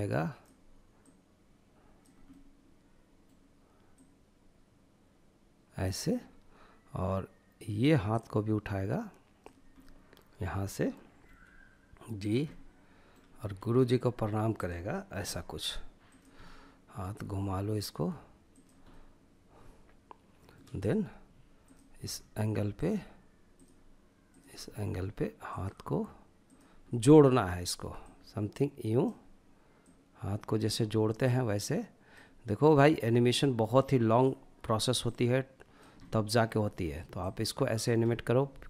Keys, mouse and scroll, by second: 1.3-2.9 middle drag, 2.9 click, 7.1-8.8 drag, 8.8-10.2 middle drag, 10.2 g, 11.2 click, 11.4-12.4 middle drag, 12.4 g, 13.5 click, 14.1 r, 15.1 click, 15.4-16.2 middle drag, 16.2 r, 17.5 click, 17.9-19.7 middle drag, 19.7-20.9 drag, 21.0 r, 21.7-23.5 drag, 23.6 r, 24.5-25.9 drag, 25.9-26.7 middle drag, 27.0-28.5 drag, 28.8 click, 30.2-35.0 drag, 35.0-36.2 middle drag, 36.2 click, 37.0-37.9 middle drag, 38.2 scroll up 1, 38.4 middle click.